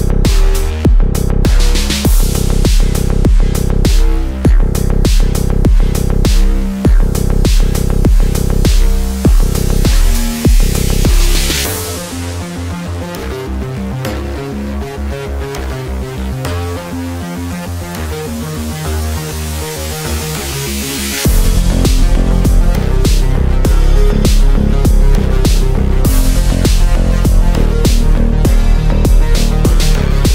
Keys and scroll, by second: 16.5 shift+F2, 16.7 Escape, 19.2 ctrl+z.